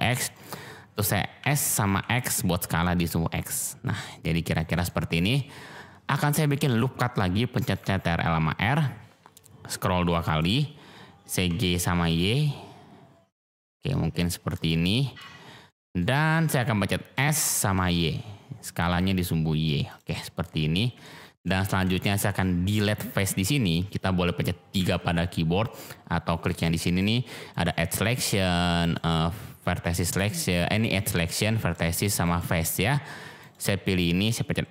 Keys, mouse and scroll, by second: 0.1 click, 0.5-0.9 middle drag, 1.3 s, 1.9 x, 4.5 click, 4.8-5.3 middle drag, 6.1 middle click, 8.4 ctrl+r, 11.4 g, 12.0 y, 14.5 click, 14.9 middle click, 15.6-16.0 middle drag, 17.1 s, 17.7 y, 19.8 click, 20.1 click, 21.0 shift+click, 22.0 shift+click, 22.8 click, 24.7 3, 26.4 click, 26.8 click, 27.5 click, 28.8 click, 31.0 click, 31.5 click, 32.2 click.